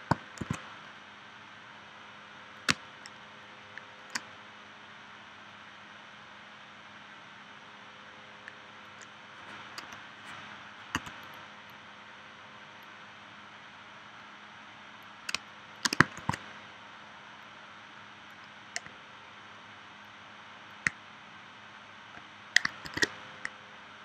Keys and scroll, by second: 0.4 shift+c, 2.7 space, 11.0 a, 15.4 space, 16.2 shift+c, 22.8 super+s.